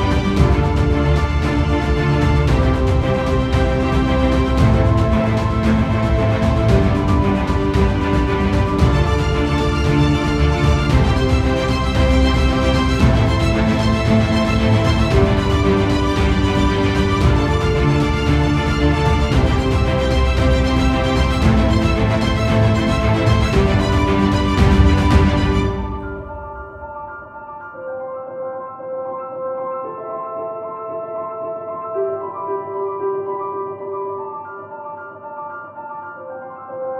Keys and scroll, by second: 1.3-2.1 typing, 4.5 typing, 7.7 typing, 10.9-11.8 typing, 14.6 ctrl+0, 23.2 ctrl+0, 23.8 ctrl+i, 36.6 ctrl+i, 36.7 ctrl+z.